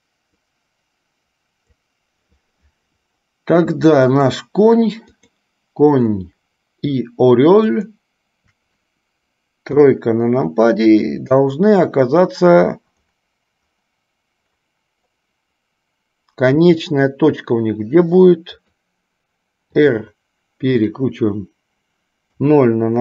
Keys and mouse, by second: 0.5-2.2 drag, 4.2 click, 5.5 click, 8.0 shift+click, 10.0 KP_3, 16.8 g, 19.8 r.